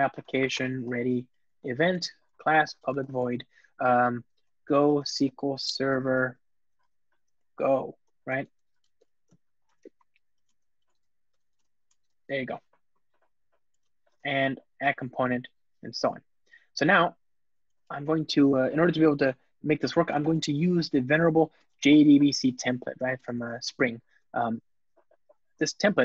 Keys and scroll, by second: 9.5 Return, 14.8 Return, 19.8 Return, 22.5 Return, 23.3 ctrl+space.